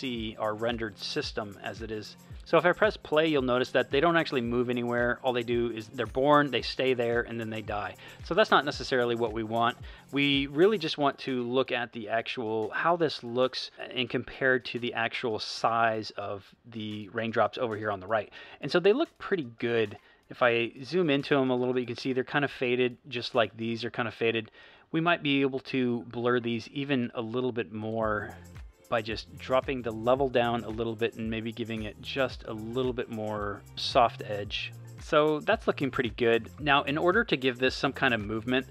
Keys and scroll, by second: 2.3 space, 7.9 space.